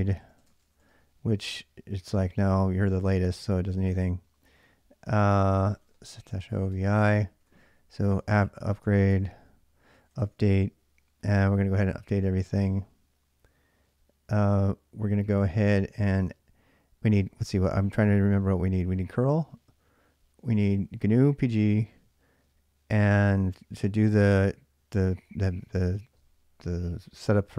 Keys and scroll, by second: 0.0-1.2 typing, 4.1-10.6 typing.